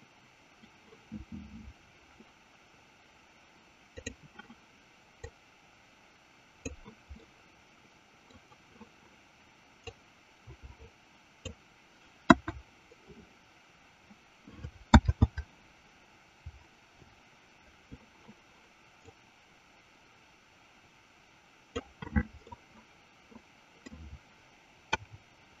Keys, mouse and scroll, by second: 3.9 click, 5.1-7.1 drag, 7.5-8.9 middle drag, 10.2-12.0 drag, 12.7 KP_1, 15.9 ctrl+z, 19.0-22.1 drag, 23.1-24.1 middle drag, 25.3 KP_0.